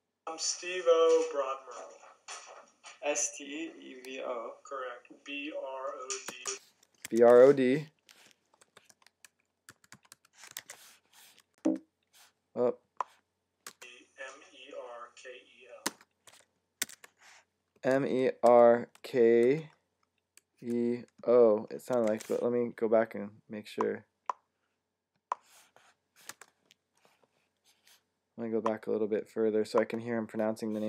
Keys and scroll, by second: 6.9 Tab, 9.3-10.5 typing, 16.7 Tab, 17.6-19.3 typing, 20.4 typing, 21.9 Tab, 21.9 typing.